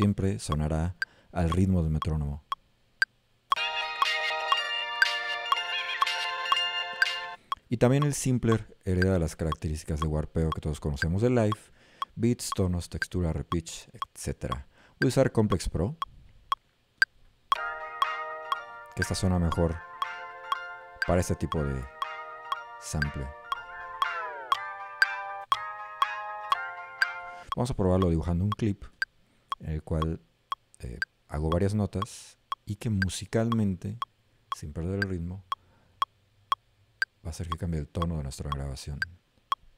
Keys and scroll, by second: 3.6 a, 17.9 a, 24.6 d, 26.5 s.